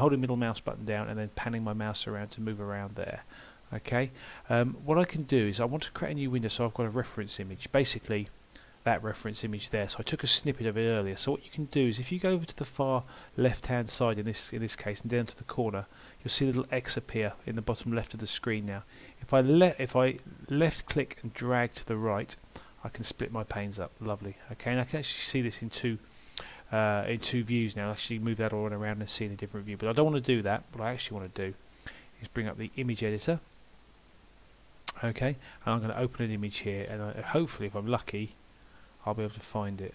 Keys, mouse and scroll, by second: 28.0 middle click, 31.2 click, 35.2-35.5 scroll up 1, 36.7 click, 36.7-37.0 scroll up 1.